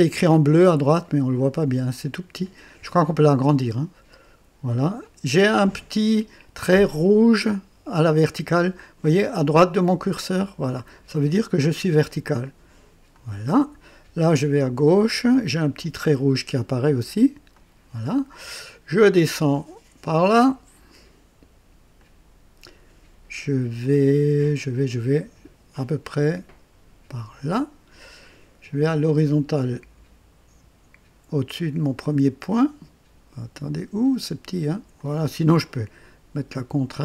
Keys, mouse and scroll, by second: 1.5 right click, 13.1 click, 17.5 click, 21.9 click, 27.1 click, 34.9 click.